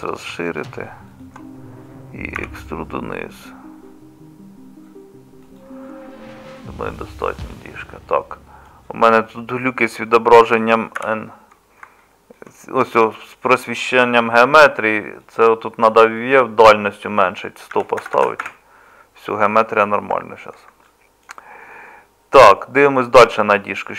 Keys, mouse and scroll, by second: 2.4 e, 11.0 n, 18.1 KP_0.